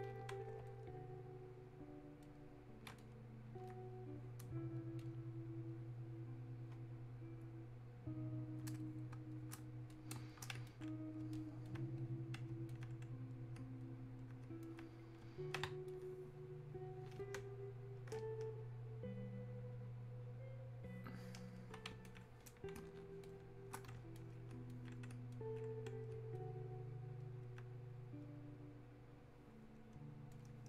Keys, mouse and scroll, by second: 7.5-10.7 ctrl+drag, 10.7-17.4 shift+drag, 17.4 ctrl+space, 22.1-23.7 drag, 25.4-30.6 alt+drag.